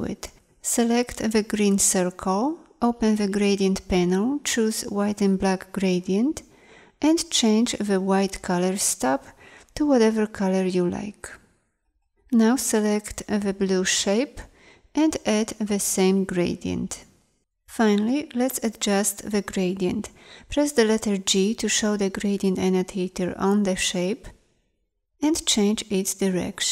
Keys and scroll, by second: 0.8 a, 12.5 a, 15.8 i, 20.6 g.